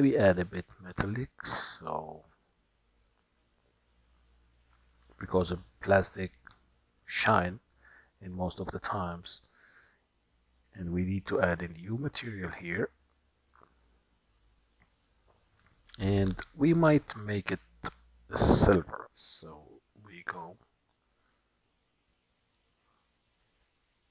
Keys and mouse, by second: 0.5-3.9 drag, 4.9-7.5 drag, 12.7 click, 14.3 click, 15.9 click, 19.1 click, 20.8-22.6 drag.